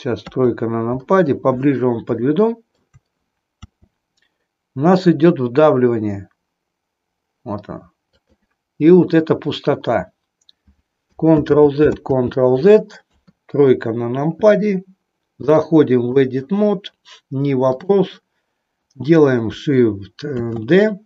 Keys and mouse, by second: 0.2 KP_3, 2.3 shift+middle click, 3.5 r, 8.2 click, 11.3 ctrl+z, 11.9 ctrl+z, 12.9 KP_3, 15.3 click, 17.8 click, 20.4 shift+d.